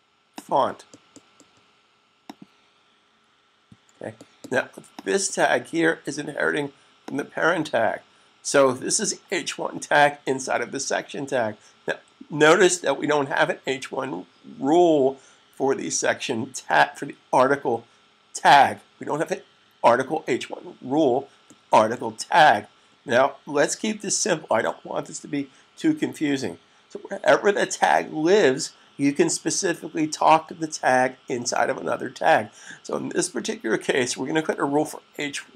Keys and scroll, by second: 3.4 super+s.